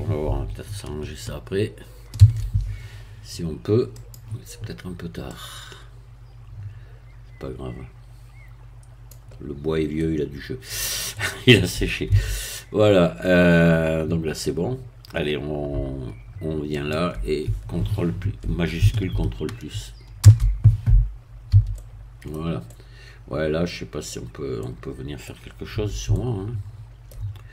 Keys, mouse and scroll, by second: 2.1 shift+d, 3.9 click, 5.3-9.3 drag, 9.5-9.9 scroll down 2, 9.9-12.1 middle drag, 12.1 Tab, 12.8-13.2 scroll up 2, 13.2-15.7 middle drag, 16.7 shift+click, 20.2 ctrl+shift+KP_Add, 21.5 a, 21.7 middle click, 22.7-25.7 middle drag, 26.1-27.5 shift+middle drag.